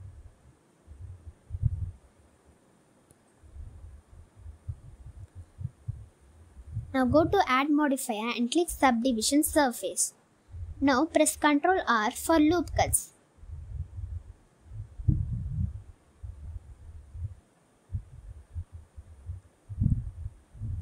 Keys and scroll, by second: 1.5 g, 1.7 z, 3.3 i, 5.5 g, 5.7 z, 7.3 Tab, 11.6 Tab, 12.3 ctrl+r, 13.0 ctrl+r, 13.8 ctrl+r, 15.7 ctrl+r, 17.0 Tab, 19.3 1, 20.6 s.